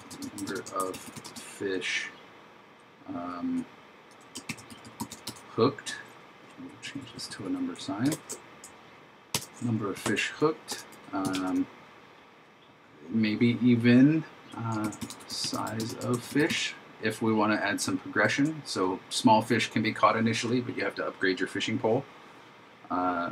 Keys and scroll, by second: 0.8 shift+f, 4.5 shift+h, 8.1 alt+shift+Left, 9.4 shift+3, 10.1 super+Right, 14.9 shift+s, 16.2 shift+f, 18.4 shift+0.